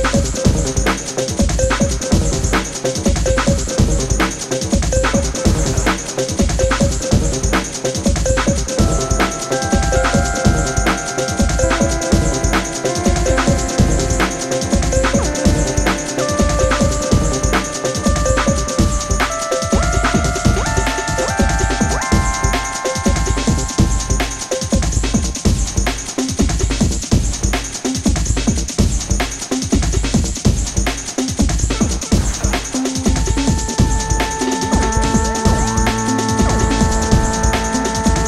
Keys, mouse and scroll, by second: 3.0 alt+scroll down 1, 3.2 ctrl+shift+z, 3.9-5.2 alt+drag, 5.9 ctrl+d, 6.4 alt+scroll down 1, 6.7 shift+click, 7.8 ctrl+g, 8.5 click, 10.3 ctrl+shift+g, 11.2 alt+scroll up 1, 11.4 space, 11.4-11.8 click, 11.7 space, 12.1-15.4 drag, 19.4-20.8 typing, 21.2 Return, 22.3 click, 22.8 ctrl+a, 24.1 Tab, 26.8 click, 27.3 ctrl+a, 28.7 click, 31.1 ctrl+a, 31.2 ctrl+v, 32.6-34.9 drag.